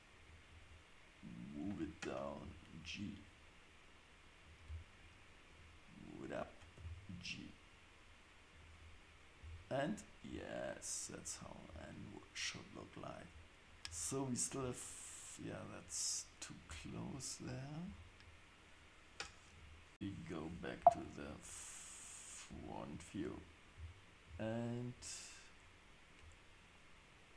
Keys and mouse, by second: 2.4 g, 5.5 click, 6.8 g, 9.4 Tab, 16.7 Tab, 19.5 KP_7, 21.4 click, 22.5 KP_3.